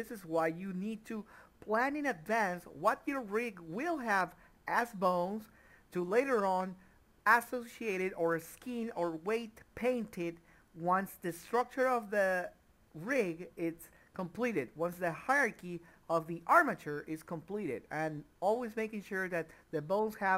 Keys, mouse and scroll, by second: 2.8 ctrl+z, 3.6 ctrl+p, 6.4 click, 8.9 click, 9.2 Tab, 11.1 middle click, 14.0 click, 14.7 middle click, 16.4 click, 16.8 middle click, 18.4 click, 18.7 middle click.